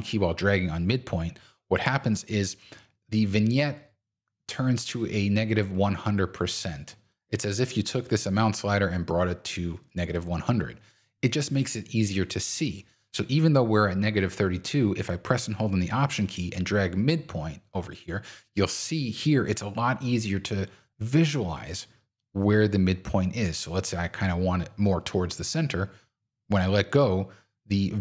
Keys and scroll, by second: 12.3 super+z.